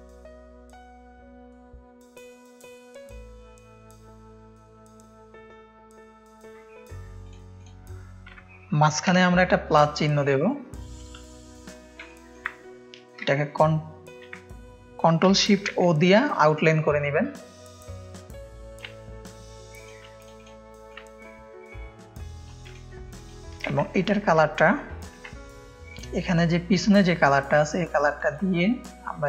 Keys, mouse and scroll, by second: 0.2 click, 0.6 ctrl+space, 0.6 ctrl+click, 1.5 click, 1.5 space, 2.0 ctrl+space, 2.0 ctrl+click, 3.4 click, 5.8 ctrl+space, 5.8 ctrl+click, 7.3 click, 7.6 click, 9.1 KP_Add, 11.6 click, 12.1 ctrl+space, 15.7 ctrl+shift+o, 16.6 click, 17.4 click, 18.8-19.9 drag, 20.9-22.6 shift+drag, 22.7 drag, 23.2 click, 28.3 click.